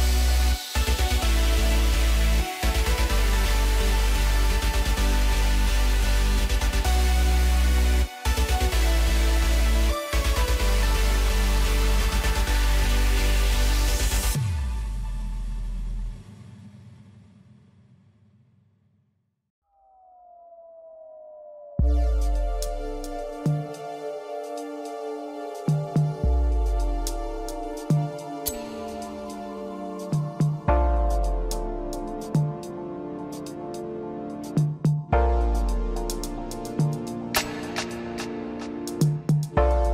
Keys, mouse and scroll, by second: 2.0 scroll down 2, 2.2-3.4 middle drag, 3.4 drag, 4.2 KP_1, 4.9 scroll down 3, 5.9-8.4 middle drag, 8.4 click, 9.2 click, 9.7-10.1 scroll up 1, 10.1-11.8 middle drag, 11.8 s, 14.1-16.0 middle drag, 16.0 KP_1, 16.9 Tab, 17.4 Tab, 18.6 click, 19.5 Tab, 20.4-21.6 scroll up 1, 21.6 click, 23.6 1, 25.4 click, 28.4 click, 29.5 click, 31.3 g, 36.5 g, 39.6 Tab.